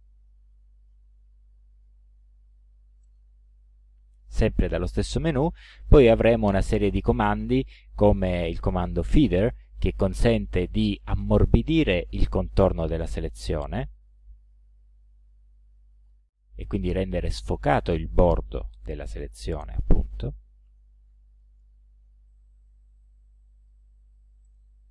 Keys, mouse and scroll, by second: 1.3 ctrl+i, 3.0 right click, 10.0 click, 13.8 click, 15.3 ctrl+alt+click, 20.0 ctrl+z, 21.4 ctrl+click, 22.1 ctrl+z, 23.6 ctrl+z, 24.5 ctrl+right click.